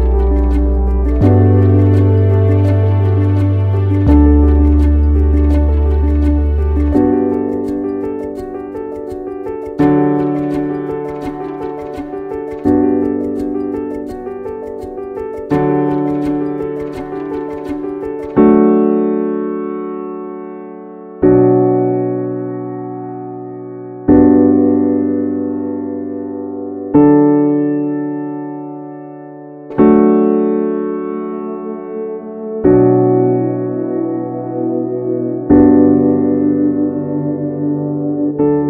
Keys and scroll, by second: 22.0 ctrl+k.